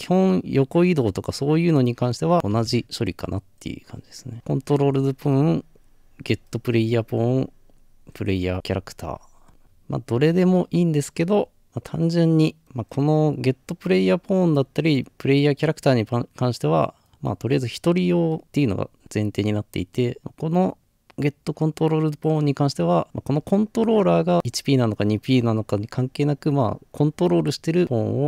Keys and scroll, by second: 2.6 Return.